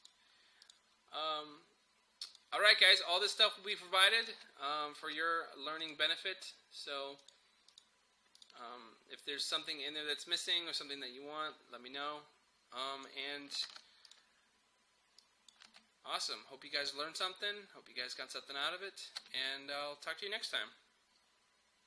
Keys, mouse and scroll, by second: 0.0 click, 4.4 space, 5.9-13.7 drag, 13.7 ctrl+s, 14.1 click, 15.7 space, 18.0 typing, 19.3 space.